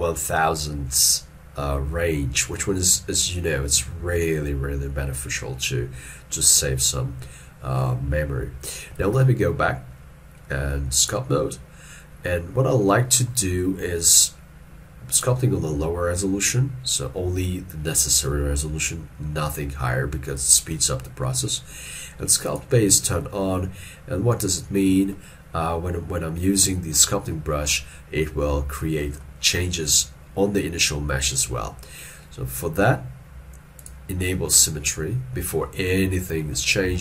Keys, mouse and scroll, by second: 9.0 ctrl+Tab, 12.9 middle click, 25.2 middle click, 35.7 middle click.